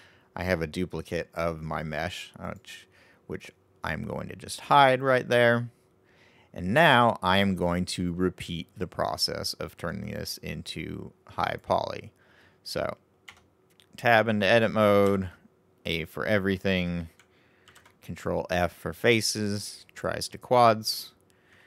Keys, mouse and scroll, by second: 2.9 click, 9.8 right click, 11.7-13.2 right drag, 13.2 Tab, 15.0 a, 17.6 ctrl+f.